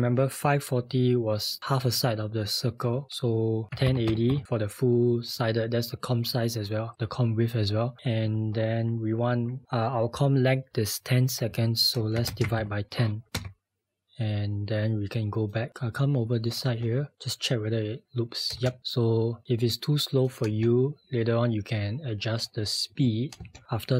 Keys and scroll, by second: 3.5-4.8 typing, 11.9-13.1 typing, 13.3 Return.